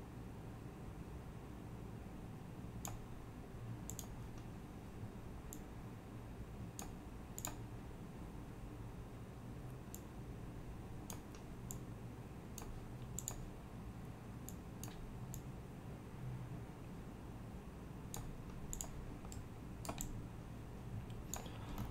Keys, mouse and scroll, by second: 2.0 click, 3.9 click, 5.6 click, 7.5 click, 9.2 click, 10.1-11.1 drag, 10.1 scroll, 10.2 scroll down 2, 11.7 click, 13.2 click, 14.9 click, 15.4-15.7 scroll down 1, 15.7 click, 16.1 click, 16.2 click, 16.9-18.5 drag, 18.7 click, 19.4-19.9 right drag, 20.0-20.6 drag, 20.7-21.8 drag, 21.8-21.9 scroll.